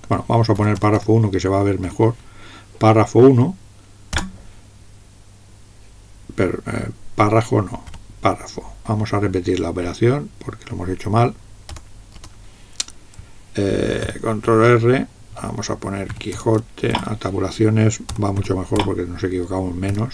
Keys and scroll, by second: 1.0-1.8 typing, 9.8 Left, 11.8 Return, 12.2 Return, 14.0 ctrl+r, 15.9-18.8 typing.